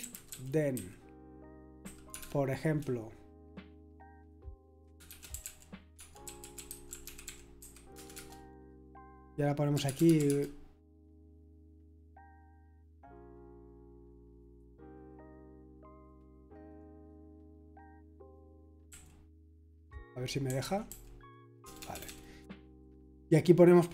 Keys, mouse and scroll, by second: 0.0-0.8 typing, 1.8 typing, 5.0-10.7 typing, 18.9 typing, 20.2-21.9 typing, 22.4 Return.